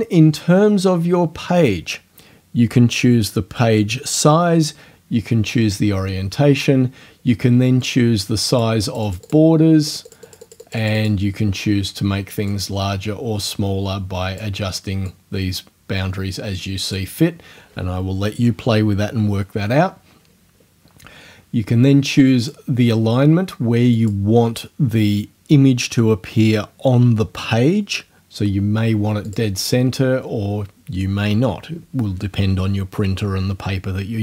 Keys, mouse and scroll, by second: 7.8 click, 9.9-11.2 drag, 12.5-14.6 drag, 15.1-17.2 drag, 22.4 click, 24.0 click, 29.3 click.